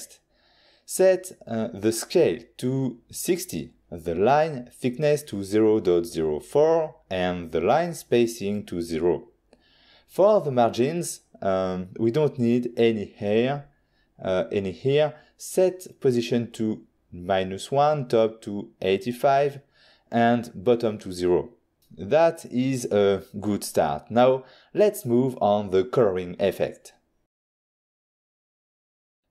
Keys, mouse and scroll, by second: 1.6 click, 1.9 click, 1.9 click, 2.1 click, 2.8 typing, 3.7 Return, 5.9 click, 6.4-6.8 typing, 7.4 Return, 9.7 click, 10.2 click, 13.3 click, 14.1 click, 15.7 click, 18.3 click, 19.1 click, 24.5 n.